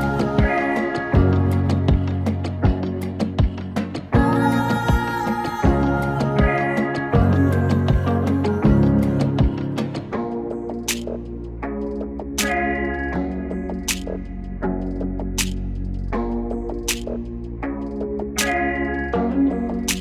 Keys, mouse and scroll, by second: 12.6-16.2 drag, 16.2 ctrl+shift+c, 18.2 shift+g, 19.0 l.